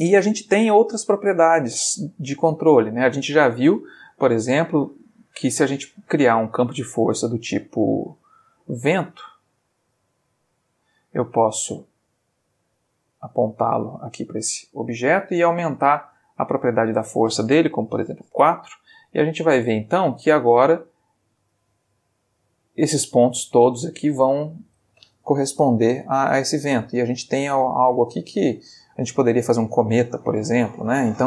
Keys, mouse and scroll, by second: 0.5-1.6 middle drag, 2.0 Escape, 2.9-3.4 ctrl+middle drag, 3.8 shift+a, 9.0 click, 10.0 g, 10.7 click, 11.0-11.8 middle drag, 11.8 r, 12.7 click, 15.9 click, 16.7 click, 18.0 4, 18.3 Return, 19.1-19.6 middle drag, 19.6 space, 20.8 middle click.